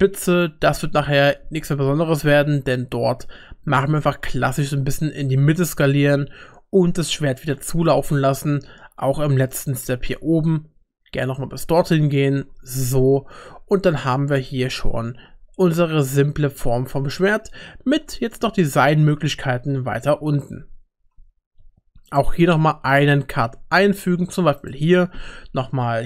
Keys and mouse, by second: 1.0 e, 4.1 s, 7.5 e, 9.9 s, 12.8 shift+middle click, 14.2 Tab, 17.2 middle click, 17.7 Tab, 20.0 middle click, 21.6 ctrl+r, 24.9 ctrl+r.